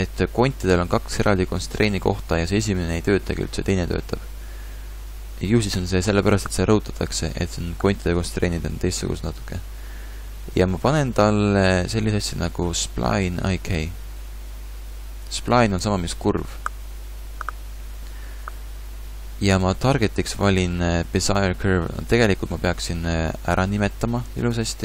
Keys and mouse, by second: 24.5 n.